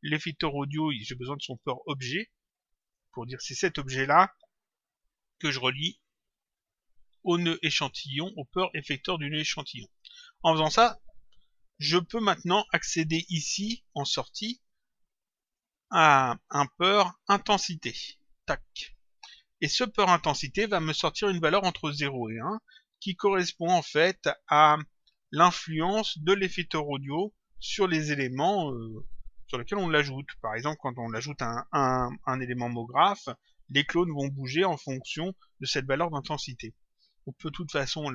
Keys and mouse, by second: 1.2 click, 2.7 click, 5.7 click, 8.9 click, 15.4 click, 18.3 click.